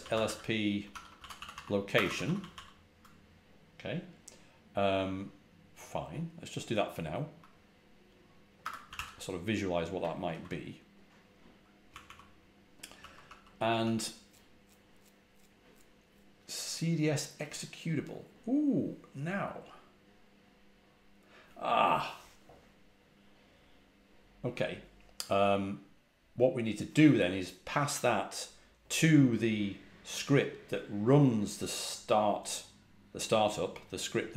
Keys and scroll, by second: 0.0-2.4 typing, 8.5-9.4 typing, 10.1 ctrl+h, 11.8-13.7 typing, 34.0-34.3 typing.